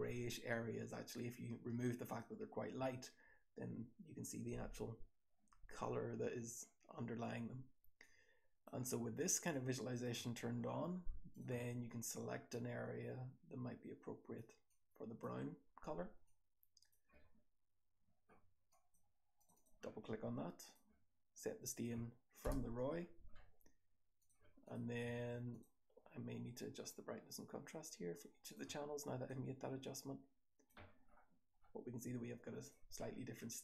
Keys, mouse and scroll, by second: 7.9-8.6 drag, 11.3 click, 12.5-14.3 drag, 14.6 click, 16.2 click, 19.3 click, 19.4 click, 21.7 click, 24.6 click, 31.0-32.5 scroll down 1, 32.5 click, 32.5-33.1 scroll down 1, 33.1-33.6 scroll up 1.